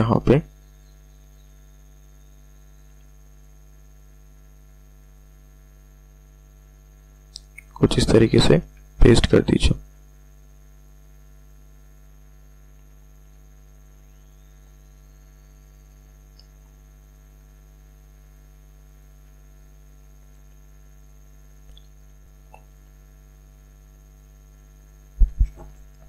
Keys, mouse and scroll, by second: 5.0 alt+click, 6.3 alt+click, 7.0 click, 7.5 alt+click, 8.2 click, 8.7 space, 8.8 click, 9.2 space, 9.6 alt+click, 10.2 click, 10.7 alt+click, 11.4 click, 11.8 alt+click, 12.5 click, 13.0 alt+click, 13.7 click, 14.2 alt+click, 15.1 click, 15.5 alt+click, 16.5 click, 17.0 alt+click, 18.3 click, 18.8 alt+click, 19.6 click, 20.2 alt+click, 21.0 click, 22.6 click, 24.8 click.